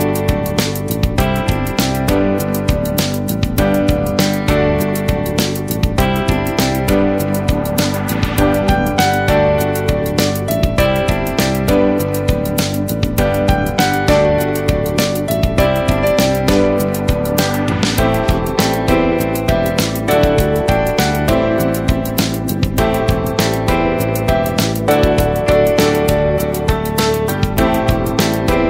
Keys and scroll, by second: 5.5 ctrl+t, 10.4 Left, 14.3 space.